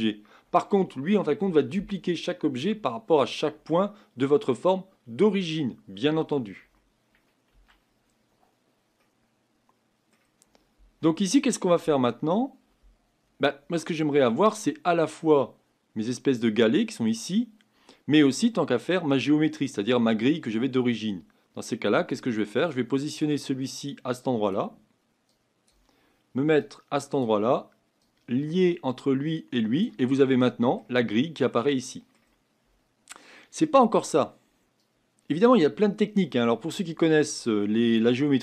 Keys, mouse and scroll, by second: 7.5 Tab, 9.2-24.5 middle drag, 24.5 click, 29.8 click, 30.4-38.4 middle drag.